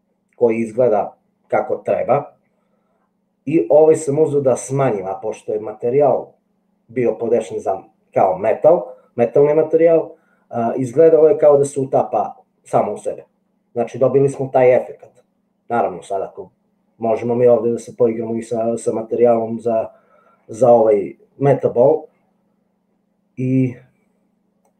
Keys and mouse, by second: 21.5 click.